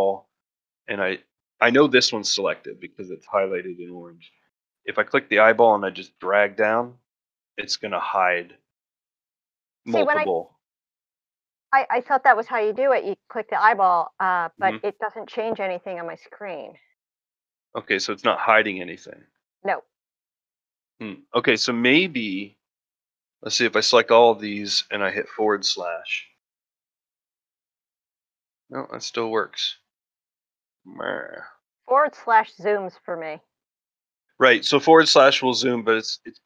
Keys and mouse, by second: 4.4 click, 5.5-8.9 drag, 11.0 click, 13.2 click, 23.2-23.5 drag, 25.3 /, 28.1-29.2 drag, 29.8 click, 31.9 /.